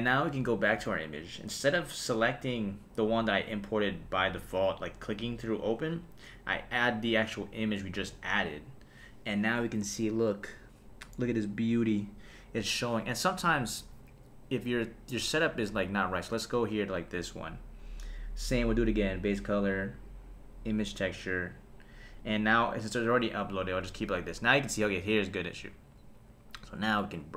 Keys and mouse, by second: 2.5 click, 16.6 click, 19.2-21.1 drag, 22.2-23.5 drag, 26.9 click.